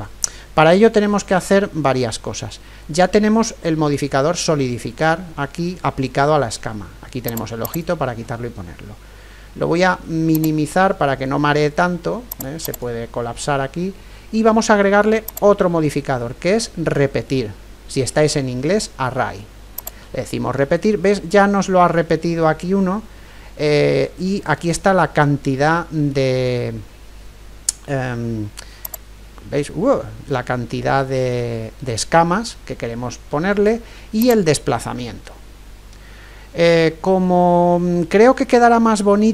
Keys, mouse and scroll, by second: 7.2-9.6 drag, 10.3-14.6 drag, 15.3-17.2 drag, 28.9-30.8 drag, 34.2-36.1 drag.